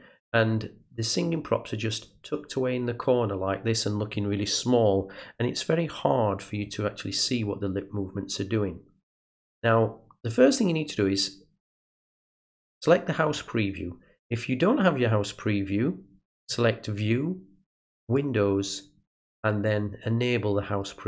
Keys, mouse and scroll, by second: 11.8 click, 16.3 click, 18.0 click.